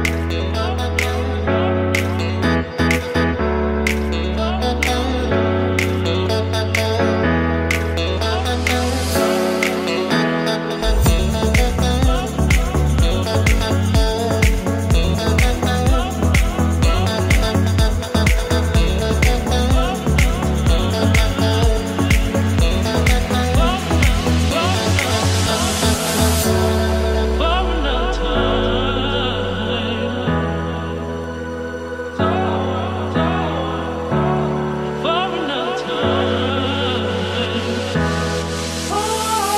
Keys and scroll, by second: 3.3 Down, 3.4 Right, 3.6 Down, 4.0 Right, 4.2 Left, 7.1 ctrl+c, 7.2 ctrl+v, 10.1 Left, 14.1 ctrl+=, 15.7 ctrl+0, 17.8 ctrl+c, 18.1 ctrl+v, 23.2 ctrl+=, 27.8 ctrl+z, 28.3 ctrl+c, 28.5 ctrl+shift+v, 32.4 Delete, 34.9 Delete, 35.4 Down, 36.3 Up, 39.4 ctrl+c.